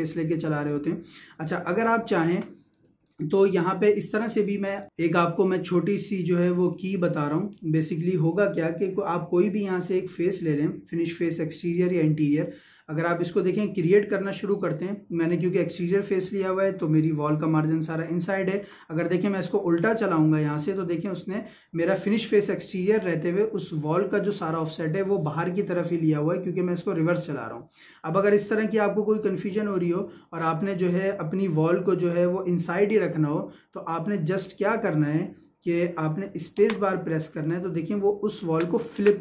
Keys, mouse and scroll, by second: 1.5 Escape, 2.7 click, 3.3 Delete, 4.8 click, 7.6 middle click, 8.8 click, 18.6 Escape, 19.8 click, 36.6 space.